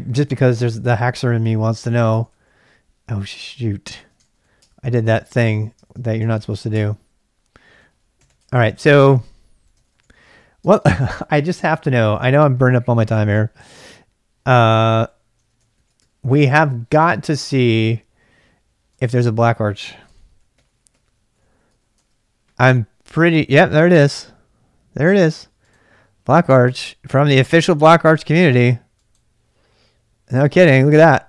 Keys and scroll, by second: 0.8 ctrl+a, 0.9 ctrl+a, 2.1 ctrl+a, 2.3 ctrl+a, 4.0 ctrl+[, 4.2 typing, 4.6 Return, 5.0 ctrl+a, 5.1 ctrl+a, 5.8-12.6 typing, 8.8 ctrl+a, 13.9-16.0 typing, 15.7 ctrl+a, 17.5 super+Tab, 19.8-22.3 typing, 23.6-24.4 typing, 28.0 typing.